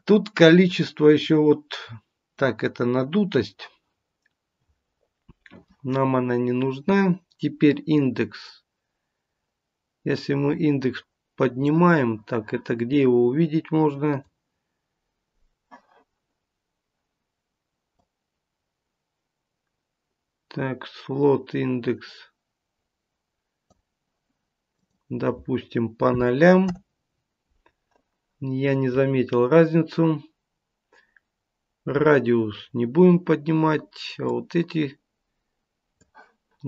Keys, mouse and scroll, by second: 7.8 click, 14.2 click, 17.8 click, 24.7 click, 34.2 click.